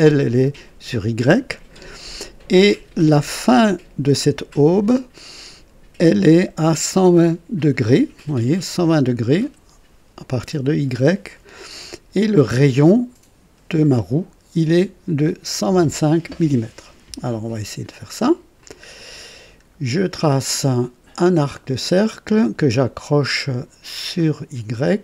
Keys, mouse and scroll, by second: 18.6 click, 21.5 click, 24.7 click.